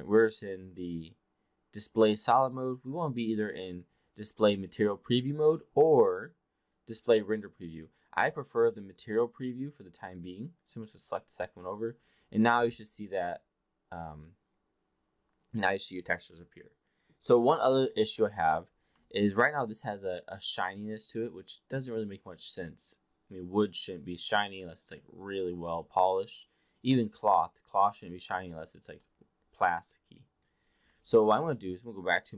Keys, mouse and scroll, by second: 11.0 click, 19.1-27.9 alt+drag, 28.5 alt+middle drag, 29.0 alt+middle drag, 30.1 alt+click.